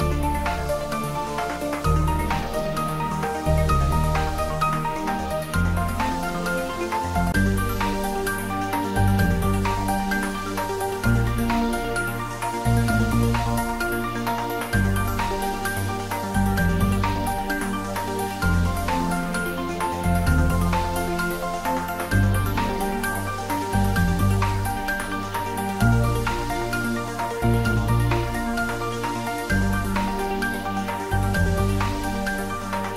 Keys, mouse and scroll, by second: 5.0-5.7 scroll down 1, 9.6 click, 11.8 click, 14.2 click, 17.2 scroll down 1, 18.0 middle click, 19.8 click, 22.2-27.6 drag.